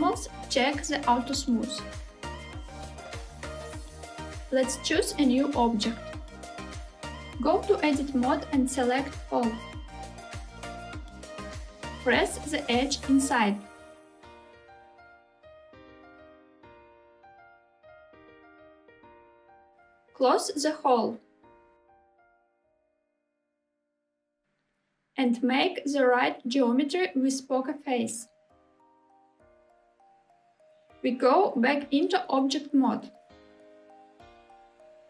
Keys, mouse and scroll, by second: 0.1-0.7 scroll down 1, 1.6 click, 4.3 click, 7.6 Tab, 10.0 a, 12.3 e, 13.1 s, 18.9 click, 19.8 e, 21.3 s, 24.3 click, 26.0-29.4 right drag, 26.0 3, 33.1 Tab.